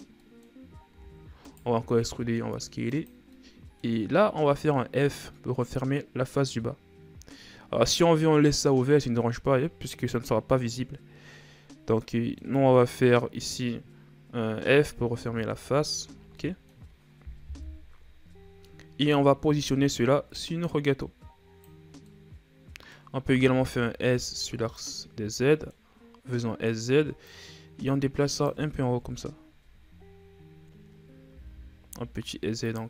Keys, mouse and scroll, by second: 0.7 middle click, 1.4 e, 3.8-4.8 middle drag, 4.8-5.3 scroll up 3, 5.3-9.5 middle drag, 10.6-11.3 scroll down 4, 11.3-12.9 middle drag, 12.9-14.0 scroll up 3, 14.0-15.0 scroll up 1, 15.0-15.4 scroll up 1, 15.4 f, 16.0 Tab, 16.4-16.8 scroll down 3, 16.8 middle click, 17.3-18.0 scroll up 1, 18.0 KP_1, 19.4 scroll down 1, 19.6 Tab, 20.0 a, 20.2 a, 20.9-22.4 drag, 22.4 scroll down 1, 22.6-23.8 middle drag, 23.8 s, 26.0 middle click, 26.6-27.8 scroll up 1, 27.8-29.6 drag, 29.6 KP_1, 30.6-31.4 scroll down 4, 31.4-31.8 scroll up 3, 31.8 s.